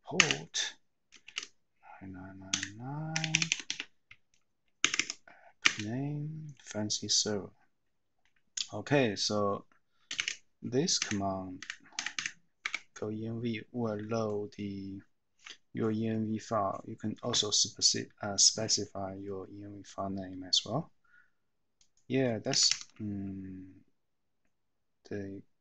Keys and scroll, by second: 0.3 Return, 3.1 BackSpace, 3.3 BackSpace, 3.5 BackSpace, 3.6 BackSpace, 4.8 Tab, 4.9 Tab, 5.6 Return, 10.3 shift+;, 11.0 Up, 11.6 Up, 11.9 Up, 12.1 Up, 12.6 Down, 13.9 typing, 22.6 Escape, 22.9 Escape.